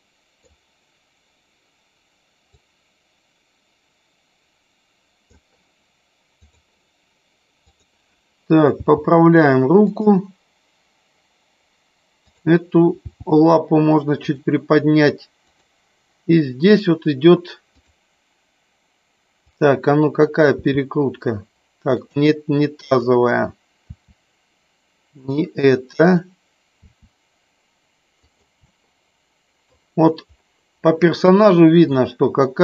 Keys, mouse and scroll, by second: 2.6-5.2 drag, 6.3 click, 7.6 click, 8.8 g, 12.2 click, 12.9 g, 19.4 click, 20.6 r, 21.9 click, 22.9 click, 23.7 r, 25.2 click, 26.8 r, 28.8 middle click, 31.2 middle click.